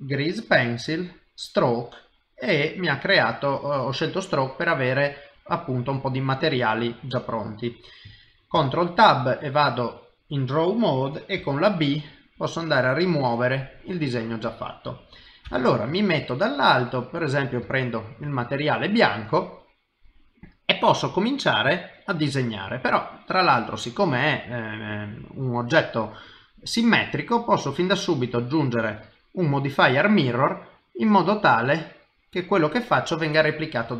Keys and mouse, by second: 2.6 middle click, 5.6 click, 6.8 middle click, 8.5 ctrl+Tab, 11.4 b, 12.8 middle click, 15.5 KP_7, 17.2 click, 17.7 ctrl+middle click, 18.3 shift+middle click, 25.0 click, 27.1 click, 31.1 click.